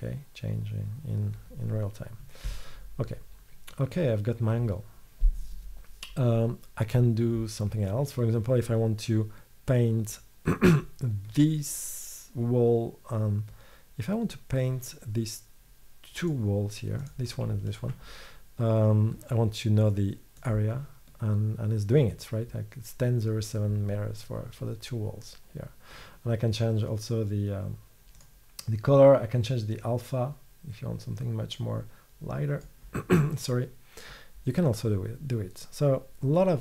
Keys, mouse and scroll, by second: 17.1-18.2 middle drag, 18.2 click, 18.2 right click, 31.9-33.8 middle drag.